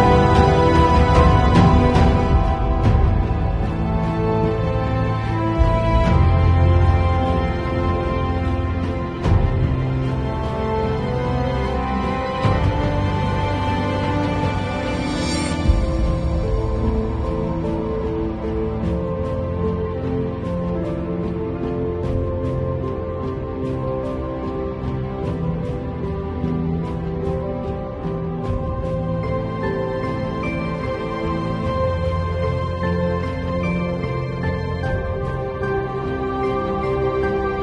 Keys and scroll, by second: 0.9 [, 2.0 ], 3.0 [, 4.3 ], 6.7 [, 8.7 ], 9.8 super+z, 10.0 super+space, 13.6 super+z, 14.8 2, 15.1 ], 16.1 [, 18.2 v, 27.1 super+i, 27.8 b, 28.3 space, 29.2 ], 30.0 x, 31.2 0, 31.6 ], 33.1 [, 34.2 super+z, 34.7 [, 35.8 super+z, 37.5 x.